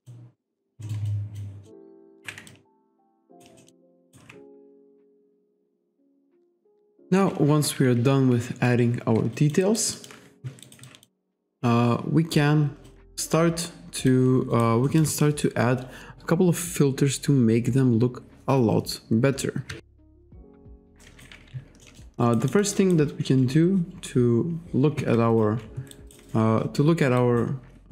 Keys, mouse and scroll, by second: 0.4 alt+click, 0.9 alt+middle click, 1.7 alt+middle click, 2.2 ctrl+z, 2.5 alt+click, 3.0 alt+shift+click, 3.3 alt+right click, 3.6 alt+middle click, 4.0 alt+right click, 9.4 alt+click, 9.7 alt+right click, 10.7 alt+right click, 10.9 alt+click, 12.9 alt+click, 14.5 alt+right click, 14.9 alt+middle click, 19.7 KP_5, 21.0 alt+right click, 21.9 alt+middle click, 22.3 alt+right click, 25.3 1, 26.0 alt+right click, 27.2 alt+right click.